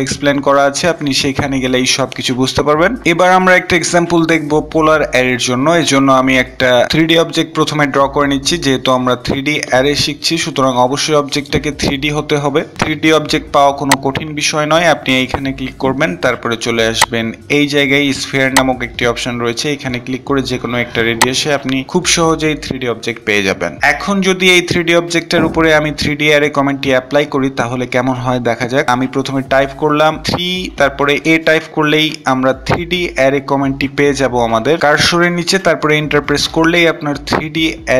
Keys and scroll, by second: 30.3 Return.